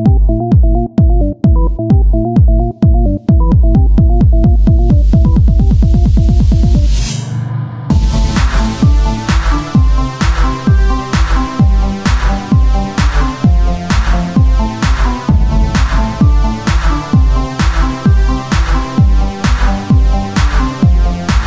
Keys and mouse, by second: 1.2 e, 2.7-3.9 drag, 7.1-8.3 drag, 8.6 KP_1, 9.1 KP_3, 10.5 r, 11.5-12.9 drag, 12.1 e, 12.5 right click, 13.2-17.5 drag, 17.2 e, 18.6 click.